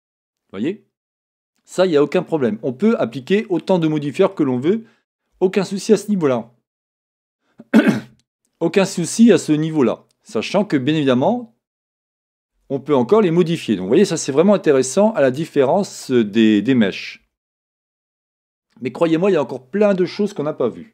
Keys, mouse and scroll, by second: 1.8-2.3 scroll down 1, 2.3-20.9 middle drag, 3.1-3.6 scroll down 1, 5.3 KP_1, 10.6-11.0 scroll up 1, 11.0-11.6 scroll down 1, 12.5 Tab, 17.2 KP_1.